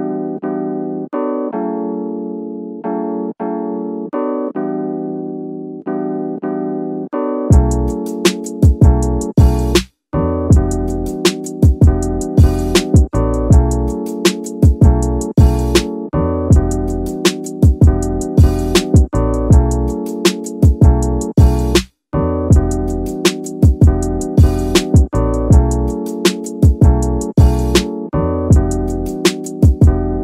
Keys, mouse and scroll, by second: 0.4 middle click, 0.8 scroll down 1, 1.1 middle click, 1.5 Tab, 1.7-2.2 middle drag, 2.4 scroll down 1, 2.6 middle drag, 3.1 scroll up 1, 3.6 right click, 4.3 middle click, 4.7-5.0 scroll up 2, 5.0-5.8 shift+middle drag, 5.8 scroll up 1, 5.8-6.1 scroll down 2, 6.1-6.7 middle drag, 6.9-7.3 middle drag, 7.5 shift+scroll up 1, 7.6 shift+middle drag, 9.6 KP_1, 12.1 shift+a, 17.1 r, 17.3 x, 17.8 KP_9, 18.0 KP_0, 18.7 click, 19.5 s, 21.0 click, 21.3 scroll up 2, 21.6 shift+middle drag, 22.4-22.9 drag, 23.1-23.4 scroll down 2, 23.9 KP_3, 25.0-27.7 drag, 28.6 s, 29.4 y.